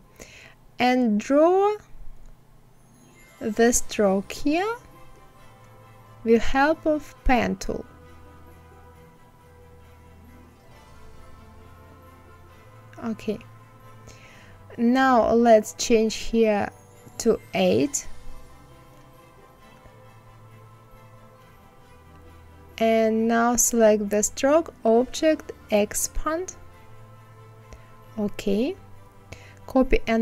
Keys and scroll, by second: 12.9 Escape, 16.1 KP_8, 16.7 Return, 28.9 ctrl+c, 29.9 ctrl+f.